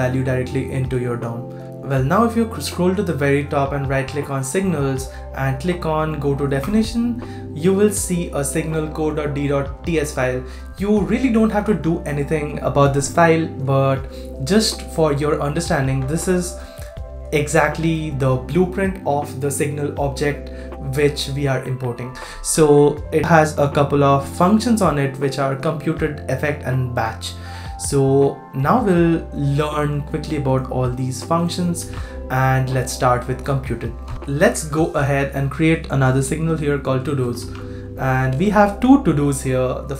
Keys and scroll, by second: 31.8 super+c, 34.0 super+w, 37.4 super+v.